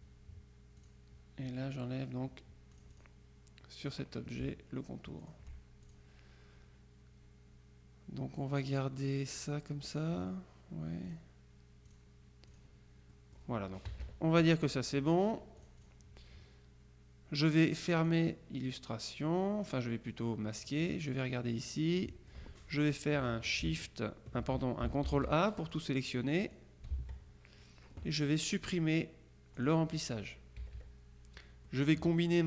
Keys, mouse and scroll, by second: 0.9 click, 2.9 click, 4.0 click, 5.3-6.5 shift+drag, 9.5 click, 11.1 click, 12.0 click, 12.6 click, 14.0 KP_Subtract, 14.9 middle click, 15.7-16.5 drag, 18.1 click, 20.7 click, 21.5 middle click, 22.1 click, 22.9 click, 25.1 ctrl+a, 25.8-27.1 drag, 27.0 ctrl+a, 29.6 click, 30.7 KP_Subtract, 31.8 click.